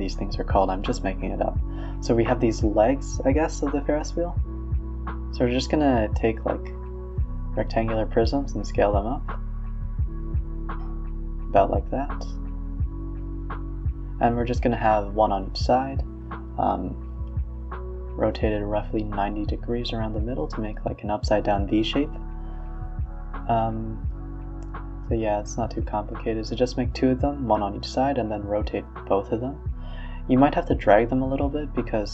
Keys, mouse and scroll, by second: 3.5-4.2 middle drag, 4.2 s, 5.0 g, 6.4-6.8 middle drag, 6.8 scroll up 1, 7.0 s, 7.6 g, 8.1 middle click, 8.5 Tab, 8.8 g, 9.5 Tab, 9.7 g, 10.7 s, 11.8 r, 13.7 KP_1, 16.3 KP_3, 17.1 g, 17.4 r, 17.8 s, 19.3-20.0 middle drag, 20.0-20.3 scroll down 3, 20.3-21.2 middle drag, 21.2 s, 22.7-23.2 middle drag, 23.2 s, 23.7-24.8 middle drag, 24.8 alt+d, 25.4-26.6 middle drag, 26.6 shift+click, 27.5-28.5 middle drag, 28.5 alt+d, 28.9 s, 31.2 s.